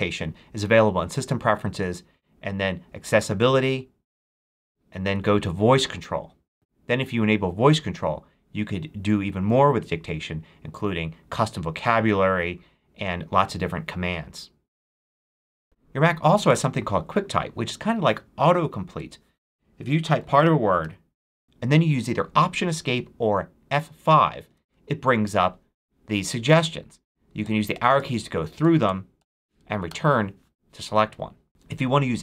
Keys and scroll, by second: 15.6 BackSpace, 19.9-21.3 typing, 24.3 alt+Escape, 27.3 Down, 28.5 Up, 29.8 Return.